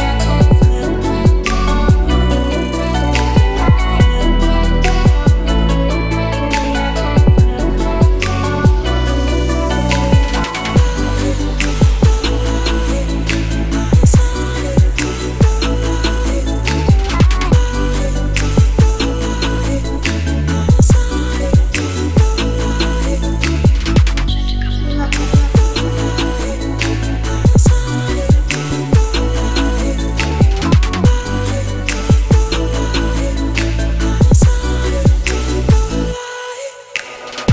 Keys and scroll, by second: 10.9-12.5 typing, 12.9 shift+Return, 13.8 Return.